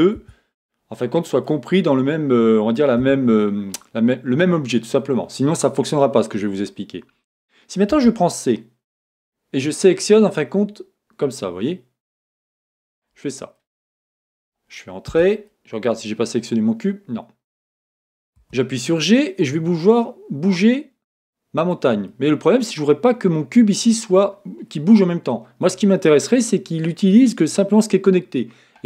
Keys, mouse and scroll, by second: 0.5 Tab, 1.0 middle click, 1.7-3.0 scroll up 2, 1.9-3.1 middle drag, 3.0 a, 3.7 scroll down 1, 8.0 c, 15.2 Return, 15.5 middle click, 18.5 g, 21.7 click, 22.3-28.8 middle drag.